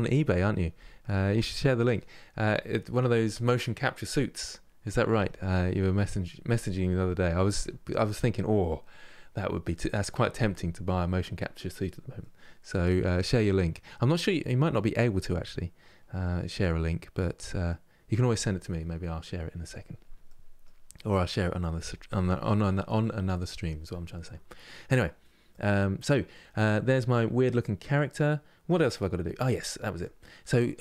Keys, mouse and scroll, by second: 11.9-23.0 middle drag, 25.2-26.3 middle drag, 26.3-26.7 scroll down 2, 26.8-29.0 middle drag, 29.0 scroll up 2, 29.6 click.